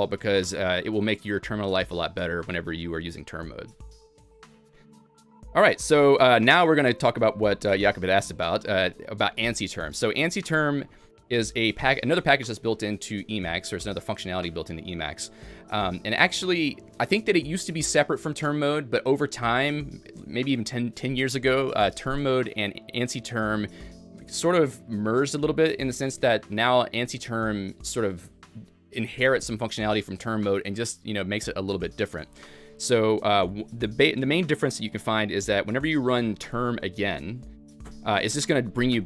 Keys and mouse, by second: 0.6 a, 2.8-3.5 typing, 3.0 click, 32.9-33.6 typing, 33.1 click, 33.6 Escape, 35.4-39.0 typing, 35.7 click, 36.2 click, 37.9 click, 38.5 click.